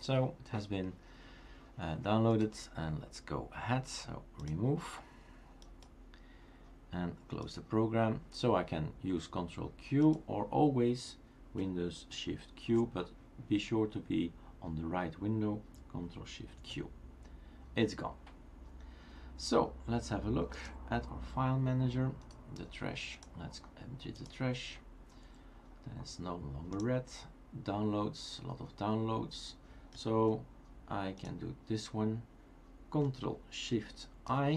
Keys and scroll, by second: 16.6 shift+super+q, 34.3 ctrl+shift+i.